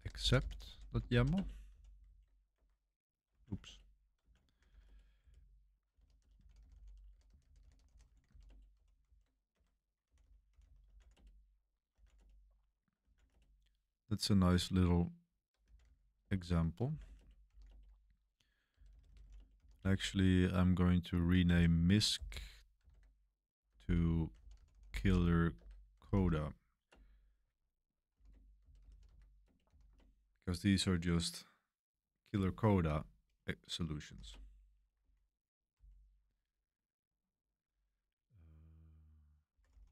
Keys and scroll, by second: 0.0-13.0 typing, 9.0 super+v, 9.5 Escape, 13.2 Return, 14.2 typing, 15.4-20.1 typing, 21.4-26.7 typing, 26.9 Return, 27.9-30.4 typing, 33.8-35.7 typing, 39.2-39.9 typing.